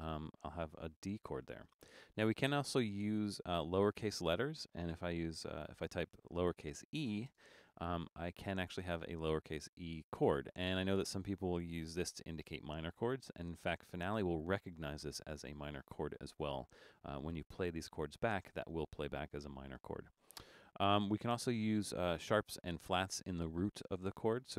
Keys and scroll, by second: 6.2 e, 7.3 space.